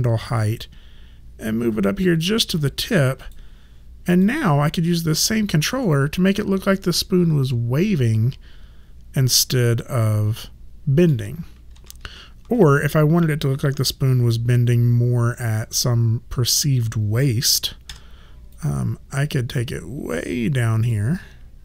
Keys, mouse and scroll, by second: 0.3 click, 3.2 click, 5.8 middle click, 11.7 ctrl+z, 17.9 w, 18.6 click.